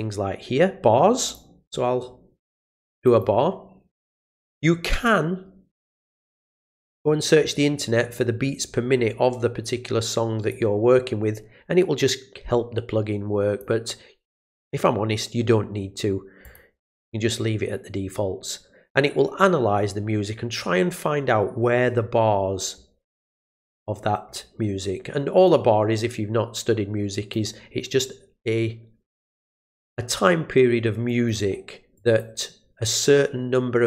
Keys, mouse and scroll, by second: 1.3 click, 3.0 click, 10.5-13.6 drag, 16.4 click, 23.3 click, 23.6 click, 25.4-27.3 drag, 31.1 click, 31.9 click.